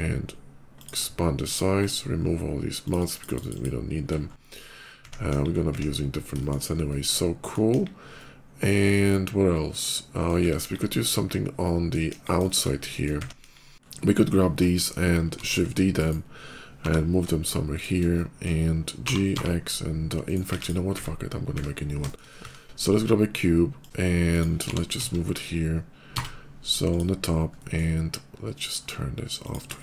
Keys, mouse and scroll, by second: 0.6 click, 1.3 click, 1.6 click, 2.7 click, 2.8 shift+click, 3.0 shift+click, 3.1 shift+click, 3.2 shift+click, 3.4 shift+click, 4.0 middle click, 4.5 middle click, 4.7 middle click, 5.1 KP_5, 5.4 middle click, 6.2 middle click, 6.7 middle click, 7.5 KP_5, 7.8 middle click, 8.1-10.1 drag, 10.4 KP_5, 10.6 middle click, 11.5 middle click, 12.0 KP_5, 12.3 middle click, 12.7 middle click, 13.2 KP_5, 14.9 shift+middle click, 15.2 shift+d, 15.8 right click, 16.6 g, 17.2 shift+g, 17.6 shift+click, 17.9 shift+middle click, 18.8 g, 19.2 x, 19.4 g, 20.1 right click, 20.4 click, 21.2 x, 21.9 shift+middle click, 22.2 shift+a, 23.6 click, 23.8 s, 24.1 click, 24.5 g, 24.8 z, 24.9 g, 26.7 click, 27.3 middle click, 28.3 click, 29.1 click, 29.6 middle click.